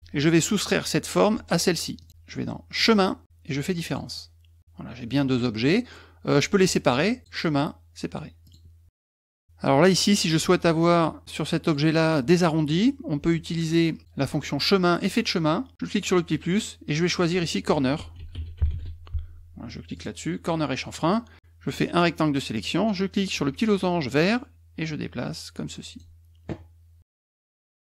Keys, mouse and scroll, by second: 2.0 shift+click, 2.8 click, 3.8 click, 7.2 click, 8.4 click, 9.1 middle click, 10.9 click, 11.6 click, 15.0 click, 15.9 click, 17.2 click, 17.7-19.2 typing, 19.9 click, 21.8 click, 24.2-26.0 drag, 27.5 click.